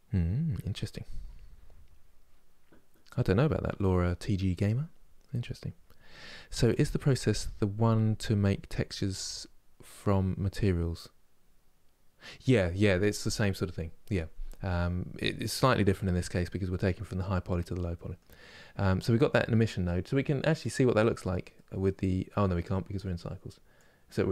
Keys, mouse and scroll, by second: 17.1-17.6 scroll down 1, 17.6-20.3 middle drag, 20.3 click, 21.2-23.5 middle drag, 23.5-24.3 drag.